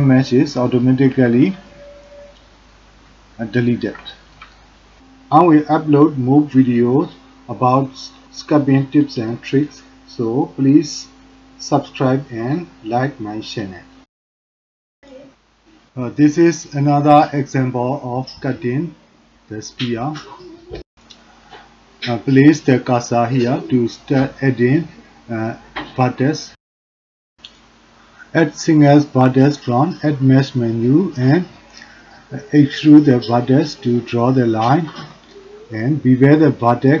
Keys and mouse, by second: 0.7 middle click, 1.3 shift+middle click, 1.7-2.7 middle drag, 3.5 middle click, 4.1 shift+drag, 4.5 middle click, 6.0-7.6 middle drag, 7.6-8.1 drag, 8.7 click, 9.3 click, 9.8 ctrl+click, 10.7 click, 11.6 middle click, 13.7 middle click, 14.2 shift+drag, 14.6-16.1 middle drag, 16.3-17.8 middle drag, 18.2 middle click, 18.8 shift+middle click, 21.2 shift+middle click, 22.0 shift+click, 28.1-29.5 drag, 30.1 e, 30.6 shift+z, 31.6 g, 32.9 e, 33.5 e, 34.5 e, 36.5 click, 36.9 g.